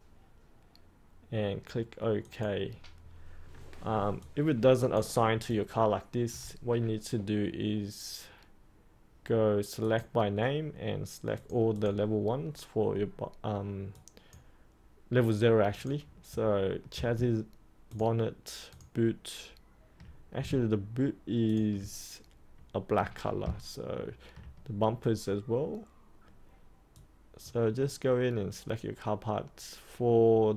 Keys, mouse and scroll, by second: 4.2 alt+click, 5.5 alt+click, 9.8 click, 17.8 ctrl+click, 18.6 ctrl+click, 21.4 ctrl+click, 26.9 click.